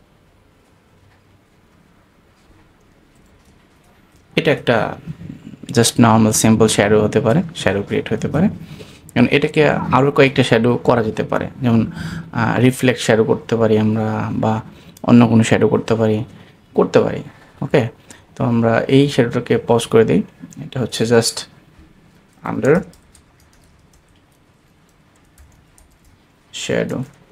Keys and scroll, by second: 3.5 alt+shift+super+space.